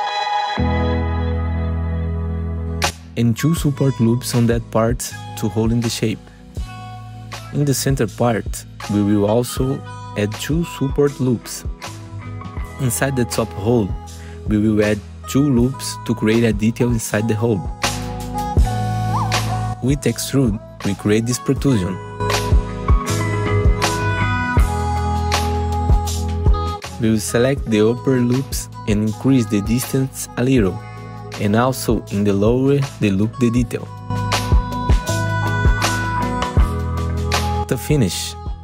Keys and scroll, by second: 3.2 ctrl+r, 7.7 ctrl+r, 12.0 F4, 13.9 F4, 18.2 4, 27.3 2, 28.6 ctrl+alt+e, 31.3 F3, 33.5 ctrl+z, 35.5 F3.